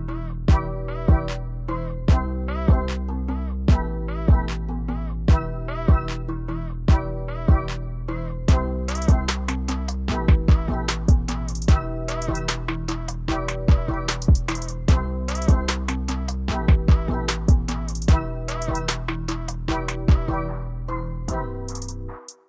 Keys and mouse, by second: 0.1 middle click, 2.3-6.5 drag, 6.5 ctrl+z, 6.5 middle click, 7.4 click, 11.6 middle click, 12.3 shift+middle click, 13.0-17.0 drag, 17.9-19.0 drag, 19.5-22.4 drag.